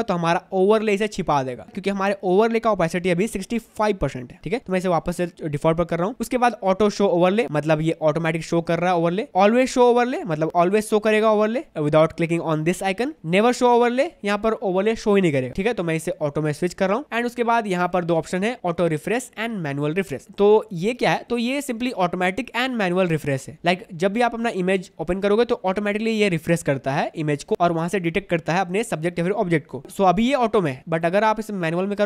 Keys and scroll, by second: 4.7 6, 5.3 Tab.